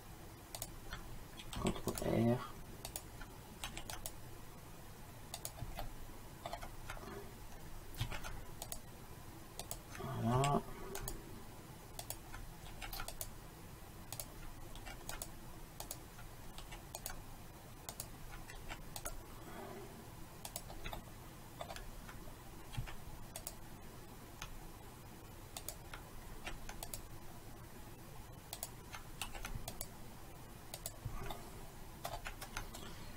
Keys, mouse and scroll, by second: 1.6 ctrl+r, 3.7 ctrl+r, 5.9 middle click, 8.1 ctrl+r, 10.4 ctrl+r, 12.7 ctrl+r, 14.8 ctrl+r, 16.7 ctrl+r, 18.6 ctrl+r, 22.9 ctrl+r, 26.4 ctrl+r, 29.3 ctrl+r, 31.4-33.1 drag.